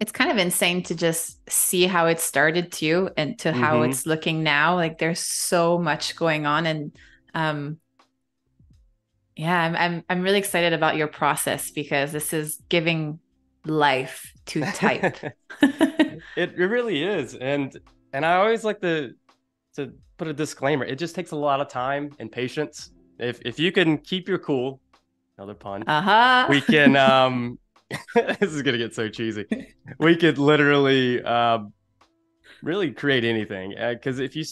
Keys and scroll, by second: 1.2 v, 2.7 space, 3.9 v, 5.6 Delete, 15.4 super+=, 15.6 space, 27.1 e.